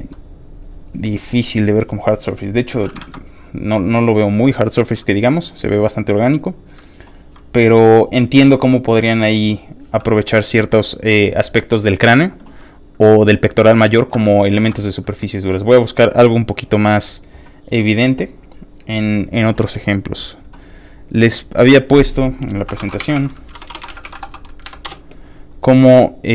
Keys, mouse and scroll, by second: 0.1-1.4 middle drag, 1.9 click, 3.0 ctrl+w, 3.4 scroll down 3, 3.6 scroll up 2, 3.9-5.1 scroll down 3, 5.3-5.6 scroll up 2, 5.3 middle click, 5.9 middle click, 14.5 ctrl+w, 15.2-15.6 scroll down 4, 19.0 scroll down 1, 21.6 click, 22.5-25.1 typing.